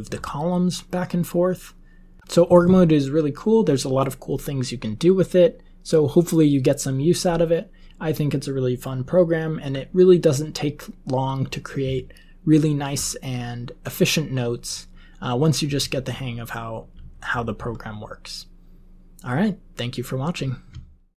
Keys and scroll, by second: 11.8 Down, 12.4-12.9 Down, 14.7 Down, 15.7 Up, 16.1 Up, 17.0 Up, 17.3 Up, 17.5 Up, 17.8 Up.